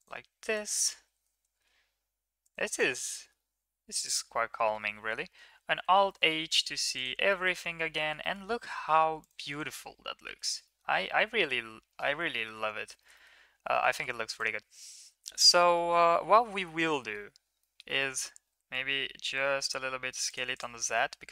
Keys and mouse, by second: 0.4 drag, 0.9 g, 3.1 shift+middle click, 4.2 Tab, 4.7 Tab, 5.8 alt+h, 6.8 Tab, 7.3 middle drag, 8.0 shift+middle click, 8.2 middle click, 9.2 right click, 9.7-10.2 middle drag, 10.4 shift+middle click, 10.7 middle click, 12.3 shift+middle click, 13.0 shift+middle click, 13.2 middle click, 13.7 shift+middle click, 13.9 middle click, 15.7 middle click, 16.8 shift+middle click, 17.0 middle click, 17.6 middle drag, 18.0 middle drag, 18.4 s, 20.5 right drag, 20.8 middle drag, 21.0-21.3 middle drag.